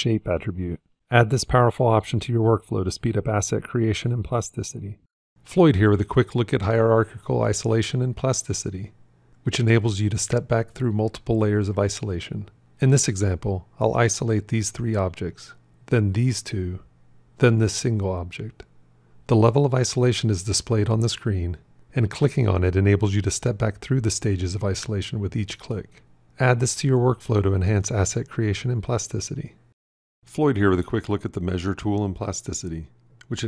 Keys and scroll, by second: 14.0 ., 16.3 ., 19.0 ..